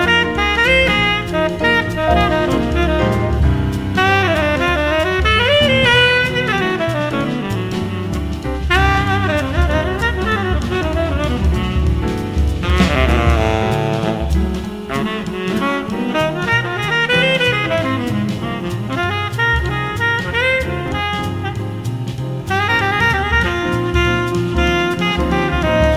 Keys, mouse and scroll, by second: 5.8-7.6 drag, 7.1 middle click, 8.0 space, 10.4 d, 20.0-24.0 middle drag, 22.3 space.